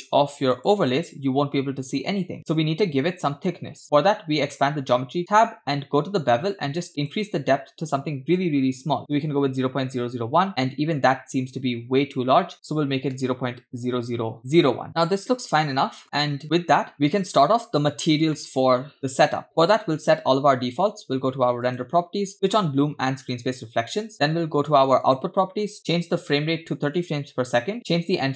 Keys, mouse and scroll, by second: 0.5 click, 2.4 click, 4.5 click, 5.3-6.3 scroll down 5, 7.0-10.3 drag, 9.8 0, 11.4-12.0 scroll down 2, 12.0-12.5 scroll up 1, 12.5-13.9 drag, 15.0-16.0 middle drag, 16.0 scroll up 1, 16.2 shift+middle click, 18.3-19.4 shift+middle drag, 21.7 click, 22.5 click, 23.2 click, 25.1 click, 26.1 BackSpace, 26.1 0, 27.0-27.8 drag.